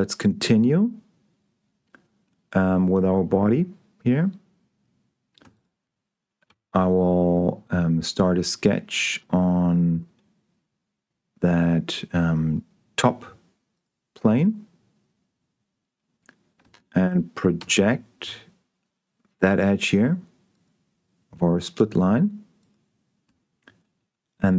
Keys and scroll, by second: 6.8 s, 17.9 p.